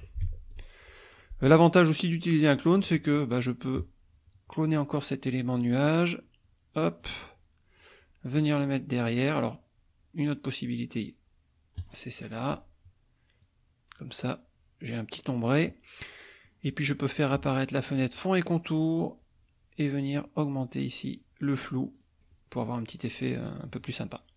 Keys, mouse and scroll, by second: 0.2 ctrl+F1, 0.5 ctrl+click, 1.1 click, 1.5 click, 2.8 middle click, 4.7 click, 5.6-7.2 drag, 11.8 click, 13.4-15.7 drag, 18.0 click, 21.1 click, 22.5 click, 22.9 middle click.